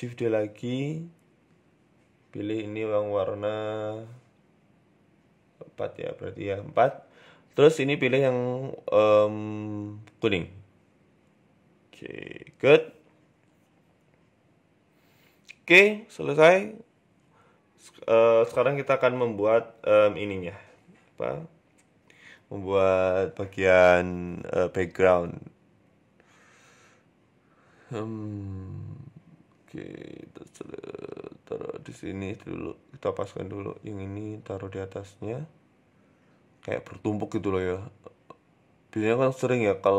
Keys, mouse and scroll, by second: 0.2 shift+right click, 0.7 shift+d, 2.3 click, 3.5 click, 3.9 click, 6.8 click, 15.1 click, 15.1 scroll up 4, 15.2-16.4 scroll down 3, 16.4 middle click, 17.1 shift+a, 18.6 s, 19.6 middle click, 20.0 right click, 20.3 shift+right click, 20.8 shift+middle click, 21.2 shift+right click, 22.5 s, 23.5 KP_1, 24.2 g, 25.0 shift+middle click, 25.3-25.9 scroll up 7, 25.9 middle click, 26.2-26.8 scroll down 2, 26.8 right click, 26.8 scroll down 1, 29.2 right click, 29.2 KP_7, 29.6 scroll up 4, 29.9 shift+middle click, 30.4 g, 31.3 r, 32.2 right click, 32.8 KP_1, 33.5 shift+middle click, 33.9 g, 34.7 KP_7, 35.4 r, 36.2 g, 37.1 middle click, 37.8-38.1 scroll up 4, 38.0 middle click, 38.7-39.2 scroll down 2, 39.8 g.